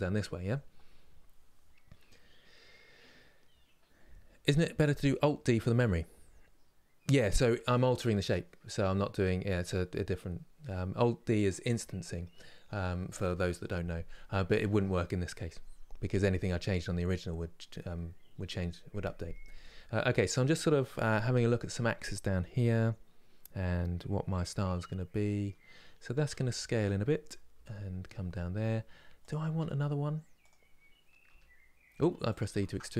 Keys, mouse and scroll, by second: 32.3 ctrl+z.